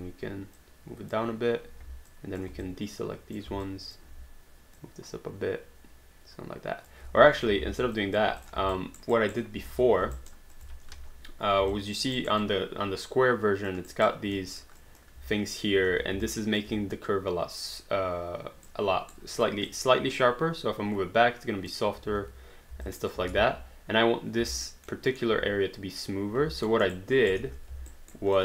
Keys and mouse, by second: 0.6 click, 2.1 alt+click, 2.7 ctrl+click, 4.0 alt+click, 4.8 click, 7.1 ctrl+z, 7.6 alt+d, 8.0 alt+click, 8.4 click, 8.8 alt+right click, 9.7 space, 10.2 alt+right click, 10.5 alt+click, 11.8 alt+click, 12.2 alt+right click, 12.5 alt+click, 13.9 alt+right click, 14.6 alt+middle click, 14.8 alt+click, 16.5 alt+click, 18.7 right click, 19.4 click, 22.1 ctrl+z, 23.1 alt+click, 23.4 space, 24.5 alt+right click, 24.9 alt+middle click, 26.7 alt+middle click, 27.3 alt+right click, 27.4 space, 28.2 alt+right click.